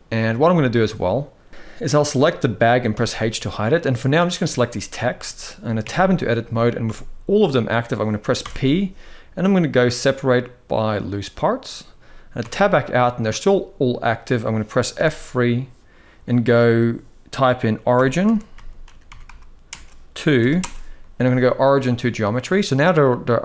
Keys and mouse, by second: 1.5-2.6 drag, 2.6 h, 5.5 Tab, 6.5 a, 8.1 p, 12.0 Tab, 12.5-13.0 middle drag, 14.7 F3, 22.3-22.7 middle drag, 23.3-23.4 middle drag.